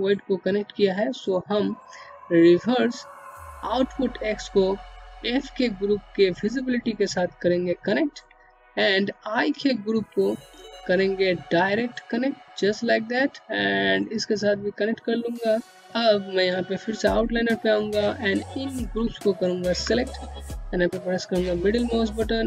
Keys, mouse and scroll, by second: 0.4 scroll down 1, 7.6 middle click, 10.0 click, 15.4-15.9 scroll down 1, 16.4 click, 17.6 click, 19.3 middle click, 22.3-22.4 scroll up 1.